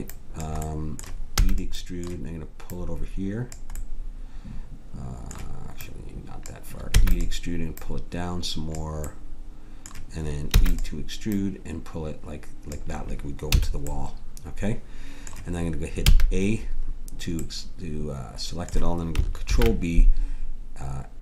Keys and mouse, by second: 0.0-1.9 drag, 1.4 e, 6.9 e, 10.5 e, 13.5 a, 16.0 a, 19.5 ctrl+b.